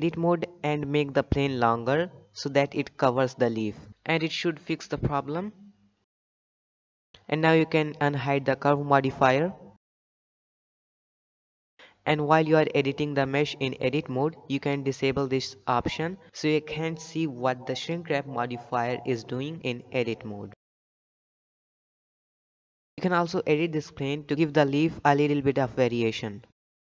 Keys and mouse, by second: 1.2 b, 3.5 g, 7.1 Tab, 9.9 click, 10.7 shift+middle drag, 11.4 shift+middle drag, 11.7 Tab, 14.1 click, 16.0 shift+middle click, 17.6 shift+middle click, 17.8 shift+d, 18.7 shift+click, 19.1 s, 20.1 r, 20.9 shift+g, 21.5 s, 22.2 shift+g, 22.4 click, 23.2 Tab, 23.2 a, 23.5 s, 25.2 middle click, 26.1 shift+middle click.